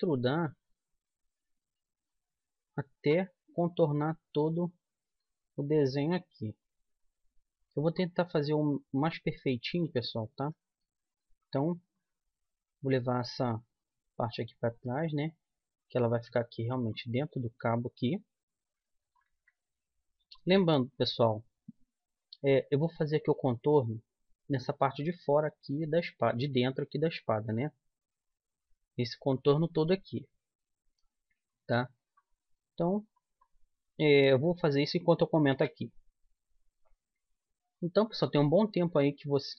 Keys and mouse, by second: 0.2-2.0 right drag, 2.0-3.7 drag, 3.4 right click, 3.7-6.6 middle drag, 6.6-8.3 drag, 6.6 right click, 8.3 middle click, 9.8 middle click, 12.4 right click, 12.9 middle click, 19.8 right click, 20.0 right click, 20.1 middle click, 20.6 middle click, 20.6 right click, 23.0-27.4 middle drag, 32.7 middle click, 35.5 e.